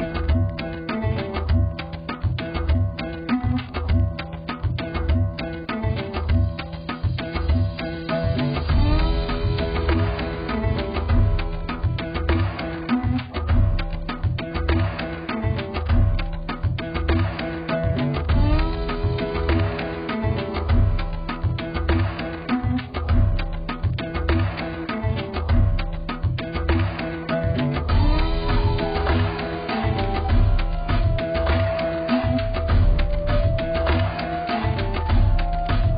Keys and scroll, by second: 5.8 b.